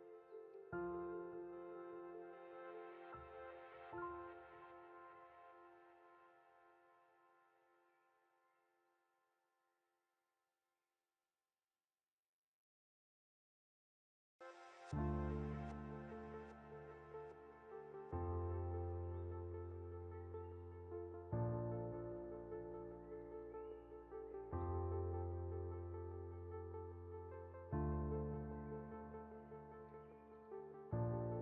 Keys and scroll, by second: 6.9 Delete, 14.9 Up, 15.4 Left, 15.8 Down.